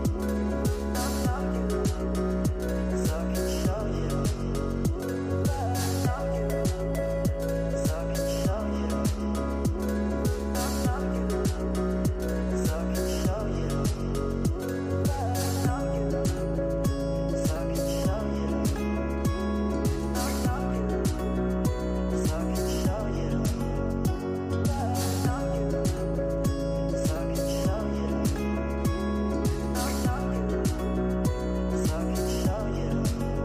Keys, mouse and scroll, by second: 2.9-4.9 right drag, 4.9-10.2 drag, 10.4-13.0 right drag, 13.0 click, 13.6-16.7 scroll down 61, 16.7 shift+click, 18.4 ctrl+l, 23.4-25.4 drag, 25.4-28.2 scroll up 58, 28.2 click, 29.2 KP_0, 29.8 scroll up 6, 30.3 scroll down 2.